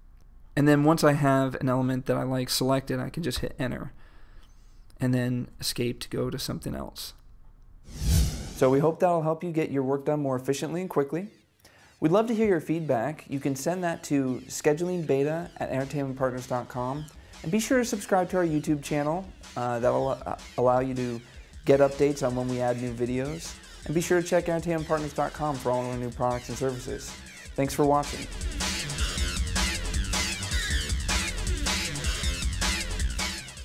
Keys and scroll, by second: 3.4 Return, 5.8 Escape, 6.7 Down.